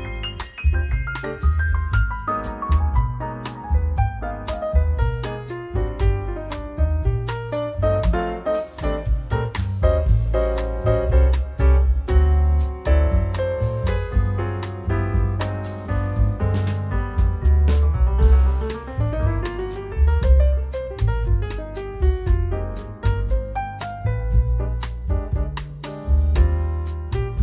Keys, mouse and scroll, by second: 3.2 click, 4.8 click, 6.0 click, 7.8 2, 10.9 ,, 11.2 5, 14.6-16.8 drag, 17.1 0, 17.8 click, 19.5 1, 20.0 2, 21.4 click, 24.2-25.0 drag, 25.7 3, 26.3 0.